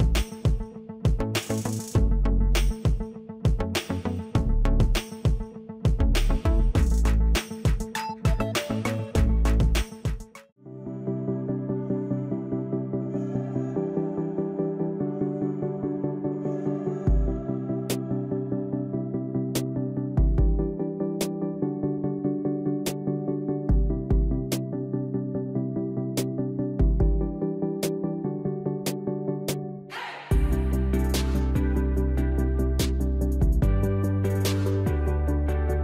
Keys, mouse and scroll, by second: 2.7-7.9 drag, 18.5-23.8 drag, 26.9 alt+shift+click, 29.2-35.8 drag.